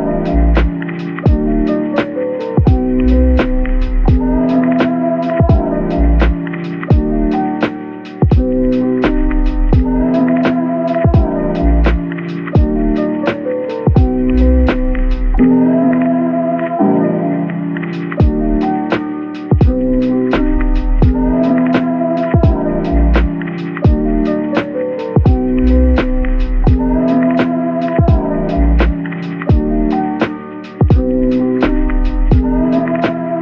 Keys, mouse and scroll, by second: 2.3-3.2 typing, 4.7 right click, 9.0 double click, 31.8 middle click.